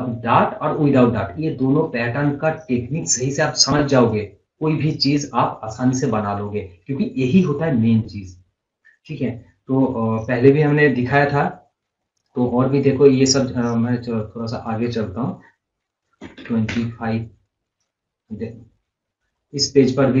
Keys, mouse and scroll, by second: 11.1 click, 11.7 scroll down 1, 13.3 scroll up 1, 14.4 click, 17.9 scroll down 1, 18.3 scroll, 18.4 scroll up 1, 18.8 scroll down 1, 19.4 scroll up 1, 19.9-20.2 scroll.